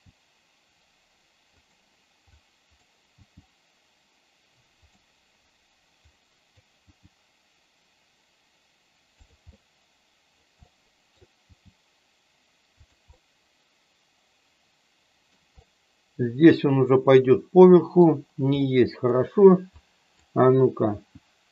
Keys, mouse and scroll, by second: 1.6 click, 2.2 click, 3.1 g, 4.7 click, 6.1 click, 6.7 g, 9.1 click, 9.6 middle click, 10.7 middle click, 11.6 g, 12.8 click, 13.1 middle click, 13.9 middle click, 15.6-17.9 middle drag, 18.6 middle click, 19.8 click, 20.9 g.